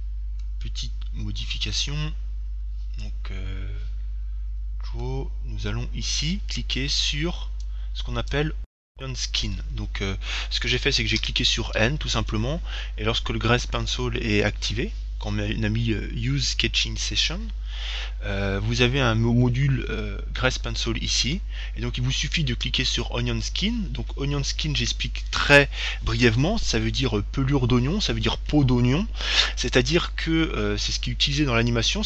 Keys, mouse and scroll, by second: 0.3-4.1 middle drag, 4.8-7.2 middle drag, 8.0-9.8 drag, 11.0 n, 11.5 n, 11.5 ,, 12.5-14.3 middle drag, 18.9-20.9 middle drag.